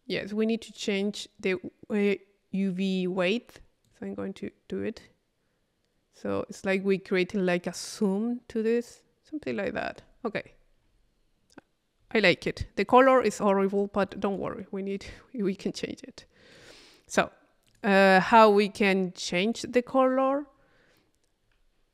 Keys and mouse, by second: 3.9-10.4 drag, 10.4-11.6 middle drag, 13.7 middle click, 14.1 click, 14.9-16.8 drag, 17.4 click, 20.2-21.7 middle drag.